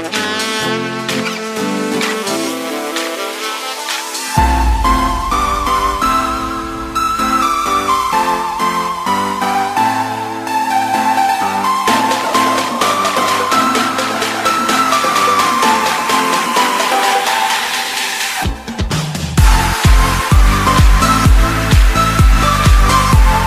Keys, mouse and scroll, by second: 1.5 KP_7, 2.5-5.5 scroll down 1, 5.5 click, 8.1 shift+d, 10.8-15.6 drag, 15.6 KP_1, 16.3-17.3 scroll up 1, 17.3-19.6 drag, 19.6-20.0 scroll up 1, 20.0 shift+middle click, 20.4-21.4 shift+scroll up 2, 21.4-21.9 shift+middle drag, 21.9-23.0 scroll up 1, 23.0-23.4 shift+middle drag.